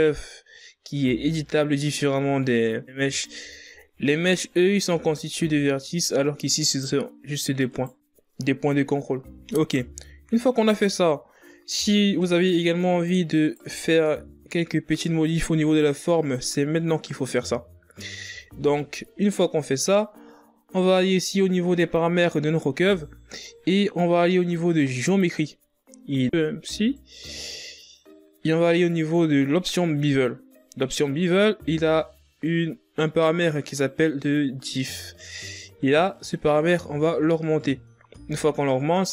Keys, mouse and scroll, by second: 1.3-1.8 scroll down 5, 2.7-3.1 scroll up 4, 3.4 Tab, 3.9 scroll down 1, 4.3 scroll up 1, 5.2 right click, 6.2 right click, 7.7 Tab, 8.4-8.7 scroll down 2, 9.2-9.6 shift+scroll down 1, 9.6-9.9 scroll up 5, 10.3 Tab, 11.0 right click, 12.2 Tab, 12.9 scroll down 3, 16.2 scroll down 5, 16.9-17.5 shift+scroll down 2, 20.3 click, 22.4 scroll down 2, 23.6-24.9 drag, 24.9 scroll down 4, 26.2 scroll down 2, 27.0-27.8 scroll down 1, 27.8 scroll down 1, 36.6-39.1 drag.